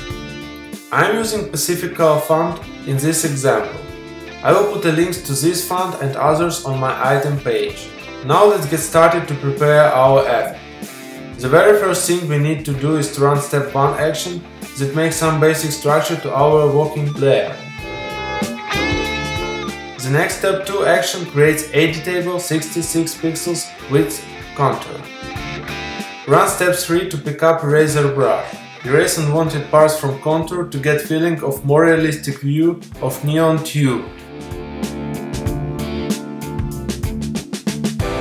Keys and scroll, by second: 4.8 v, 6.7 super+t.